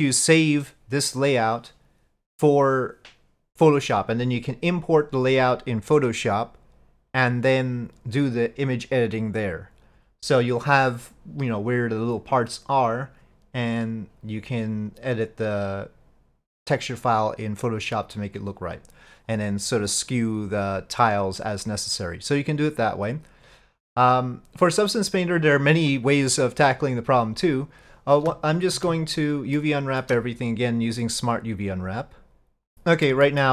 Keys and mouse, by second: 29.6 shift+middle click.